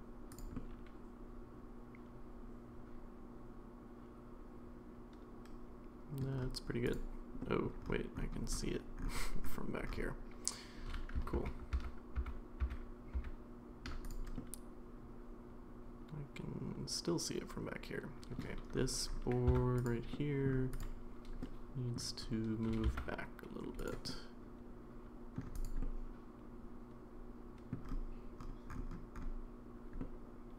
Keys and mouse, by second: 0.5-6.2 middle drag, 7.4 middle click, 11.3 ctrl+z, 11.7 ctrl+z, 12.4 ctrl+z, 12.6 ctrl+z, 13.1 ctrl+z, 14.4-18.4 middle drag, 19.5 Tab, 20.1 middle click, 20.8 click, 21.4 middle click, 22.7 g, 24.1-25.4 middle drag, 25.6 drag, 25.8-27.7 middle drag, 30.0-30.5 middle drag.